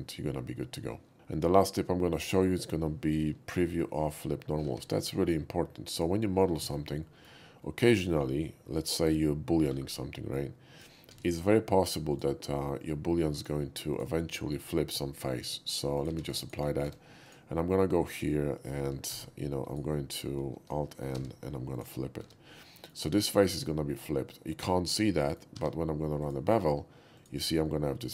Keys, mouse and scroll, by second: 1.5-1.8 shift+middle drag, 2.0 shift+middle click, 2.5 shift+middle click, 3.5 shift+middle drag, 4.7 shift+a, 6.0 click, 6.6 shift+middle click, 6.8 shift+middle click, 7.0 shift+middle drag, 7.6 shift+middle drag, 10.4-10.9 drag, 11.2 ctrl+z, 12.2 click, 12.8-13.5 drag, 14.0 click, 15.5 middle click, 16.0 click, 16.2 q, 16.9 Tab, 17.3 click, 19.1 alt+f, 19.7 alt+right click, 21.2 alt+n, 21.8 alt+click, 22.2 Tab, 22.5 middle drag, 22.8 middle drag, 23.5 click, 23.9 middle click, 24.9 middle click, 25.6 q, 26.3 click, 27.2 click, 27.7-28.1 middle drag.